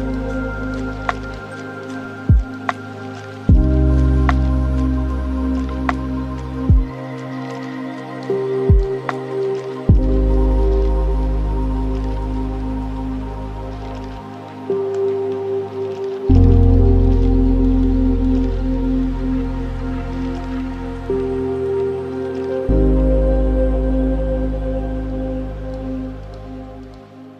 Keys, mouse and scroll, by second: 2.5-4.7 middle drag, 4.7-9.2 drag, 9.2-10.2 middle drag, 10.2-11.9 drag, 11.9-12.3 scroll down 6, 12.3-13.5 middle drag, 13.5-13.8 scroll down 1, 13.8-14.5 middle drag, 14.5 shift+a, 18.1 drag, 19.7-24.1 middle drag, 24.1-27.1 drag.